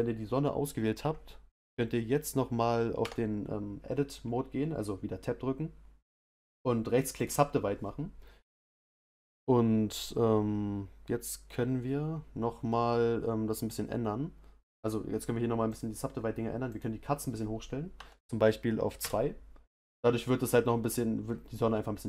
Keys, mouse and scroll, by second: 3.0 Tab, 7.2-19.0 right drag, 19.0-22.0 drag.